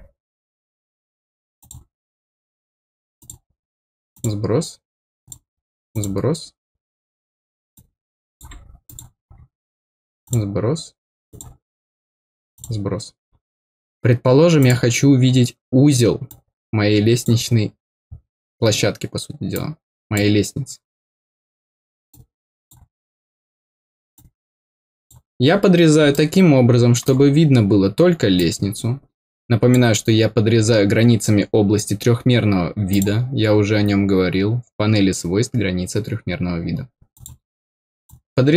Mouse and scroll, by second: 1.5 click, 3.1 click, 4.1 click, 5.2 click, 5.9 click, 7.7 click, 8.8 click, 10.2 click, 11.2 click, 12.5 click, 14.5 click, 16.2 click, 19.5 click, 22.0 click, 24.1 click, 26.1 middle click, 28.3-29.7 drag, 32.8 click, 33.4-33.8 scroll down 2, 37.1 click, 38.0-38.5 drag.